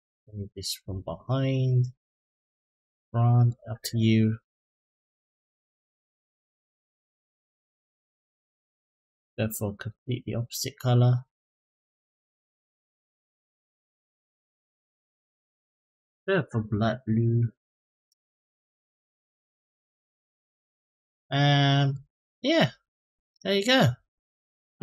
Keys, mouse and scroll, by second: 1.5-3.3 drag, 4.9 click, 6.6-8.2 drag, 8.9 click, 21.7 click.